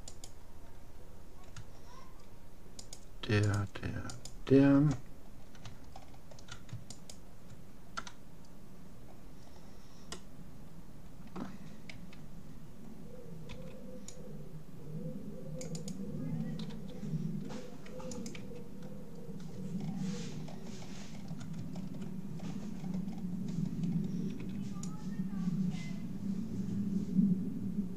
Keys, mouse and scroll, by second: 0.3-1.9 right drag, 2.9-5.7 right drag, 5.3-6.9 middle drag, 6.9-8.7 right drag, 8.7-11.7 middle drag, 11.9 a, 13.5 c, 15.9-17.5 right drag, 16.7 g, 18.5 a, 19.3 middle click, 19.9-20.9 middle drag, 24.5 c, 24.7-25.7 middle drag.